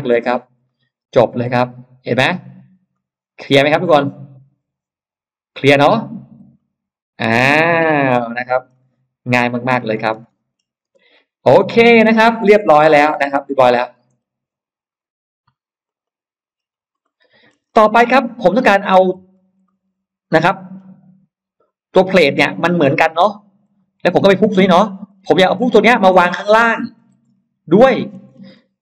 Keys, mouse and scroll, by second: 0.5 middle click, 1.9-2.3 scroll up 1, 2.7-5.4 middle drag, 6.4 click, 6.4 e, 7.3 middle click, 7.8 middle click, 8.3-8.8 scroll down 1, 8.6 middle click, 9.6 scroll down 1, 10.1 space, 10.1 middle click, 10.7 space, 11.1-11.4 scroll up 1, 11.8 scroll down 1, 12.1 Escape, 12.4-14.2 scroll down 4, 14.8-15.1 scroll up 1, 15.7 click, 16.5-16.9 scroll up 1, 16.9 middle click, 17.5-18.3 scroll up 2, 18.9-20.6 middle drag, 18.9-19.5 scroll up 1, 19.5 scroll up 1, 20.6-20.9 scroll down 1, 21.8-22.5 scroll down 2, 22.7 click, 23.7 Escape, 24.0 scroll up 1, 24.7 scroll up 1, 24.9-26.0 scroll down 3, 26.3-27.5 scroll up 2, 27.7-28.5 scroll down 3.